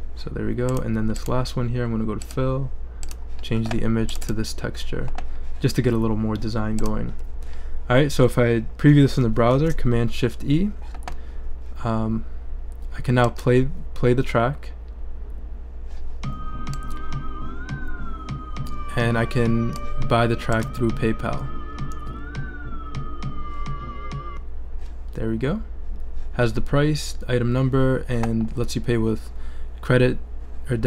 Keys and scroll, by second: 9.5 shift+super+e.